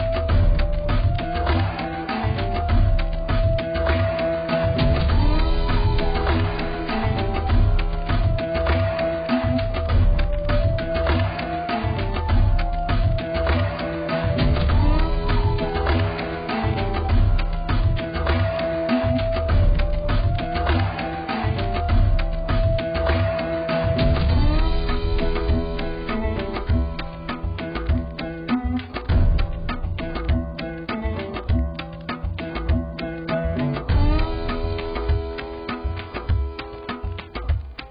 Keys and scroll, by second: 1.5 x, 21.5 z.